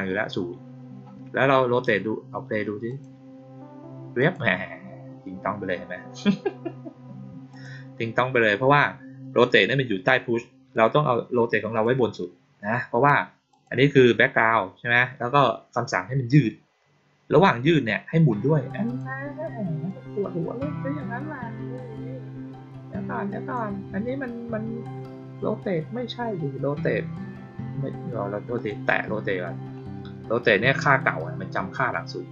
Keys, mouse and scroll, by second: 2.8 click, 4.1 click, 7.4 click, 10.8-11.7 drag, 13.4 click, 18.8 click, 19.8-23.5 drag, 28.5 click.